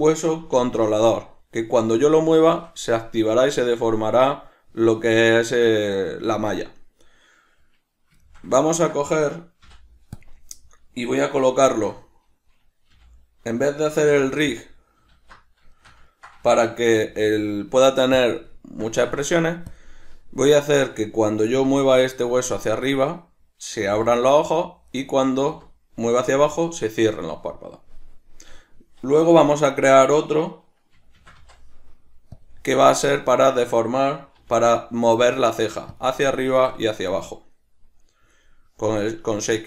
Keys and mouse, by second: 0.6 alt+q, 7.0 right click, 8.2-14.6 shift+middle drag, 9.6 ., 14.6 click, 15.1 alt+q, 15.8-18.2 shift+middle drag, 17.0 g, 18.2 click, 18.6-19.8 ctrl+middle drag, 19.0 g, 19.8 click, 21.5 g, 22.9 right click, 23.8 g, 25.0 right click, 25.3 g, 26.4 right click, 32.4 click, 34.4 g, 35.9 click.